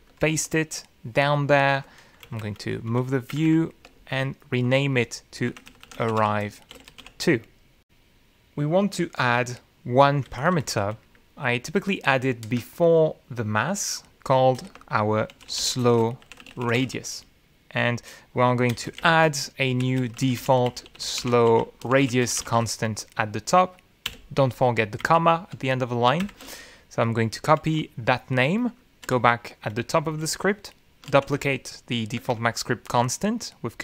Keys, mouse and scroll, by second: 0.0 ctrl+click, 0.8 Return, 1.2 Up, 1.6 Return, 2.1 ctrl+v, 4.1 ctrl+Down, 5.1 ctrl+Up, 6.5 click, 6.7-8.9 typing, 13.1 Down, 17.4 ctrl+Return, 17.9-20.1 typing, 21.5-25.7 typing, 26.9 ,, 27.8 Left, 29.0 ctrl+shift+Left, 30.4 ctrl+c, 31.9 ctrl+Home, 32.5 Down.